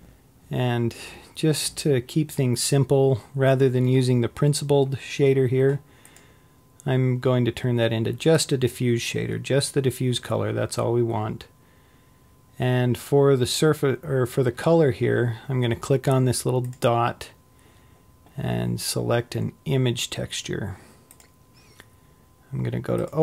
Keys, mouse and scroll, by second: 8.6-11.0 drag, 21.4 click.